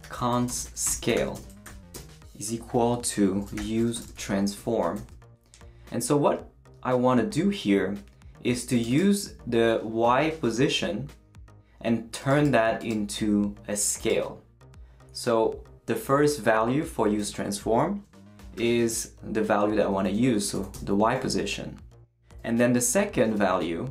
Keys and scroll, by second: 0.0-2.1 typing, 3.3-6.0 typing, 18.6 y, 20.5 ,, 20.7 space, 23.2 [, 23.2 ].